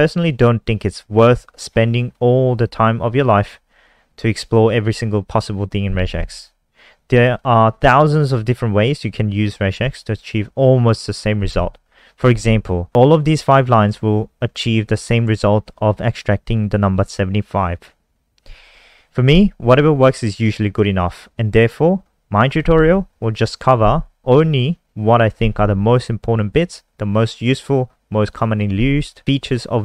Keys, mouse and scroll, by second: 18.7 scroll down 1.